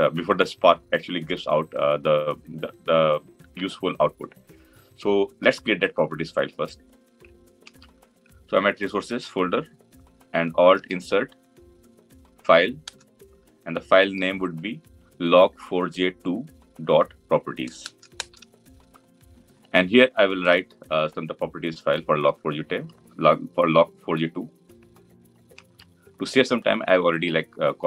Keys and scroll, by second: 10.5 alt+Insert, 14.0 ctrl+v.